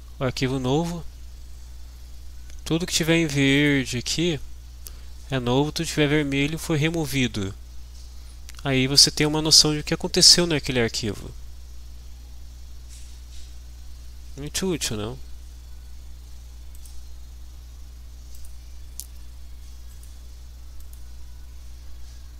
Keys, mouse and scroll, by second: 3.8 click, 14.8 click, 16.7 click, 18.6 click, 20.1 click, 20.8 click.